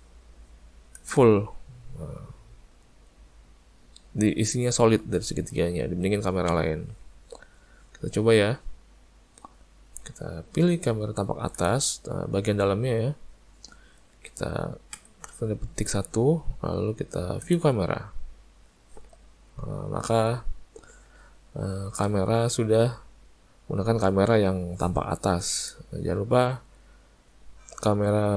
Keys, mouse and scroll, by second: 1.0 click, 11.6 click, 19.5-20.8 scroll down 3, 25.6 click.